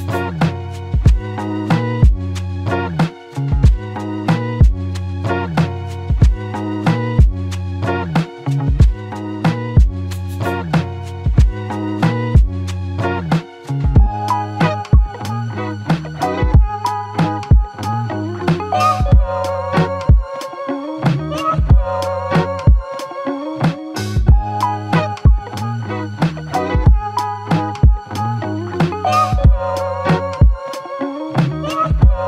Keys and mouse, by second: 1.4 double click, 5.5 alt+click, 8.9 alt+click, 10.8 double click, 15.0 alt+click, 17.1 double click, 17.9 alt+click, 19.8 double click, 21.3 alt+click, 23.0 double click, 25.5 alt+click, 28.1 double click, 29.0 alt+click, 30.7 double click.